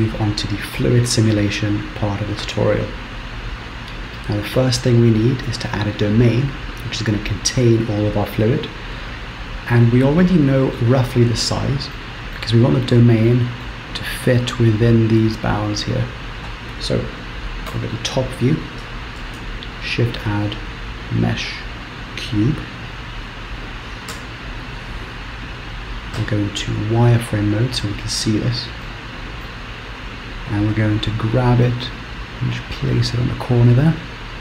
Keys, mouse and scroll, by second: 9.5 click, 10.3 middle click, 11.1-12.2 scroll down 1, 12.2 middle click, 12.2 scroll down 1, 12.6 scroll up 3, 13.3 middle click, 17.7 KP_7, 18.2-19.2 scroll down 3, 19.2 scroll down 1, 19.4 shift+a, 24.5 Tab, 26.5 z, 29.1 shift+middle click, 29.8-30.8 scroll up 4, 30.8 g, 34.0-34.4 scroll down 1.